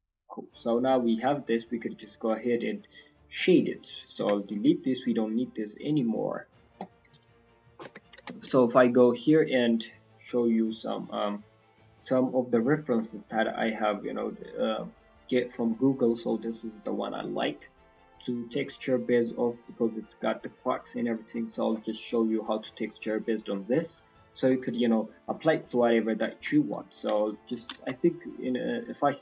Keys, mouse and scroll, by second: 0.0 click, 0.0-0.3 scroll down 4, 0.3 middle click, 0.9-1.8 scroll down 2, 1.1 middle click, 2.2 scroll up 4, 2.6 middle click, 3.0-3.4 scroll down 3, 3.3 middle click, 3.7 click, 4.1 x, 4.7 middle click, 9.6 right click, 9.7 right click, 10.2 right click, 11.1 click, 21.2-23.6 scroll down 3, 25.3-26.2 scroll up 4, 25.5 middle click, 26.2-26.5 scroll up 3, 26.5 shift+middle click, 27.2-27.7 scroll down 2, 27.7 KP_1, 28.4 scroll up 1, 28.6-29.2 scroll down 3, 28.9 middle click.